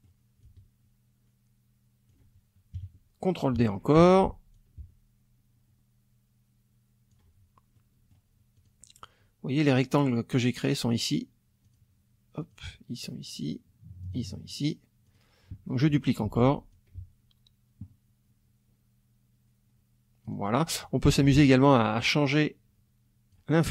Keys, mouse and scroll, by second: 0.4-2.2 ctrl+drag, 2.8 KP_Subtract, 4.0 ctrl+d, 4.5-7.3 ctrl+drag, 7.7 middle click, 8.6 click, 10.9 click, 11.6 click, 12.4 click, 14.0 click, 15.1 click, 16.2 ctrl+d, 16.7-20.7 ctrl+drag, 21.1 ctrl+F2, 21.2 ctrl+click, 22.3-23.5 drag.